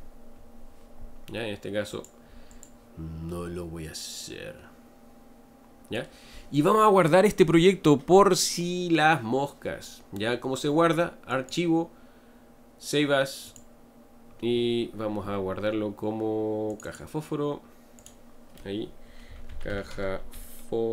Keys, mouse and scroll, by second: 2.5 click, 3.3-6.3 middle drag, 11.3-14.4 drag.